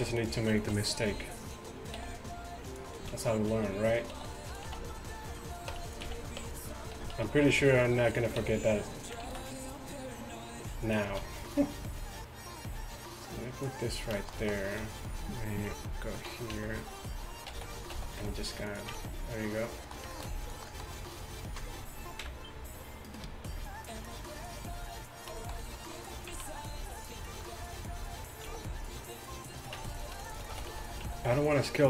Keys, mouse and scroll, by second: 0.0 z, 1.1 b, 2.0 s, 3.1-4.7 typing, 5.8 Tab, 6.1 z, 6.5 Tab, 7.0 a, 7.2 a, 8.4 s, 14.0 z, 15.7 KP_Decimal, 16.6 a, 17.6 a, 18.0 s, 19.0 Tab, 22.3 KP_1, 25.2-25.6 middle drag, 25.9 middle click, 26.3 z, 28.5 s, 29.8 Tab, 30.6 a, 30.8 a, 31.1 s.